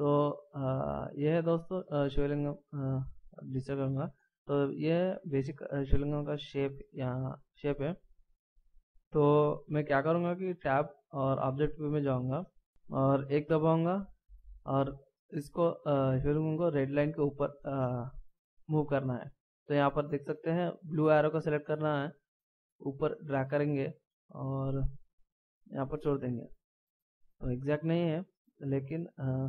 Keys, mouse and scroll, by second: 0.6 middle click, 3.2 a, 3.8 scroll down 1, 5.5 middle click, 10.6 Tab, 12.6 scroll down 1, 13.5 KP_1, 22.1 click, 25.2 click, 26.4-27.4 shift+scroll up 2, 28.6 middle click.